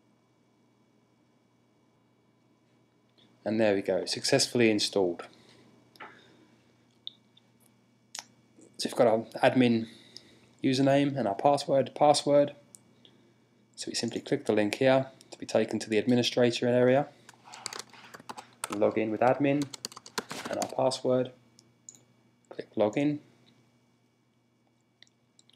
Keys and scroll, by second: 17.1-18.5 typing, 19.6 typing.